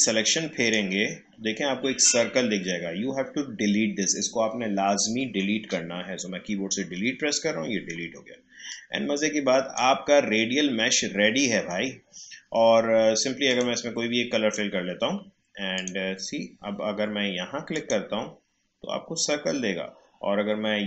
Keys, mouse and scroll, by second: 6.9 Delete, 8.7-12.2 drag, 13.4 click, 15.9 click.